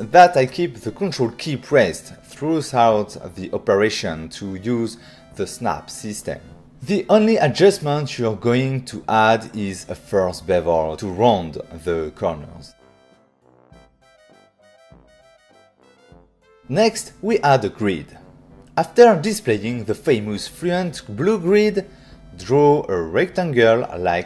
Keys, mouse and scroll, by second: 0.5 ctrl+click, 2.6 ctrl+click, 3.8 shift+click, 3.8 shift+click, 5.5 v, 8.8 shift+click, 9.9-10.5 scroll up 3, 10.6 click, 11.2 click, 12.4 shift+click, 12.8 shift+click, 13.1 click, 13.2 ctrl+middle click, 13.5 middle click, 14.4 click, 14.7 click, 15.0 click, 15.0-15.4 scroll down 1, 15.4 middle click, 15.8 click, 16.1 ctrl+middle click, 17.9 click, 18.4 right click, 20.0 right click, 20.4 click, 21.6 r, 22.1 click, 22.8 click.